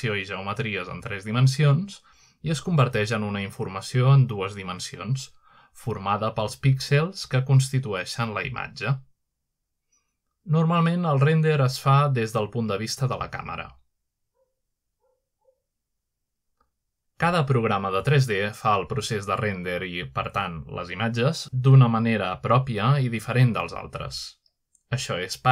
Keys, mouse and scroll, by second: 0.1-0.5 drag, 1.5-2.4 middle drag, 1.5-2.4 typing, 3.2-3.8 scroll down 1, 4.2-4.9 typing, 7.0 click, 7.3 typing, 7.6 middle click, 8.2 middle click, 8.2-9.1 scroll down 1, 9.1 middle click, 9.8-10.2 middle drag, 10.2-11.0 scroll up 1, 11.5-12.6 middle drag, 12.6 typing, 13.7-14.1 scroll up 1, 14.1-15.2 shift+middle drag, 19.7 scroll down 1, 19.9-20.3 scroll up 2, 20.7-21.3 scroll up 2, 24.5 alt+Tab, 24.8 alt+Tab, 25.3 alt+Tab.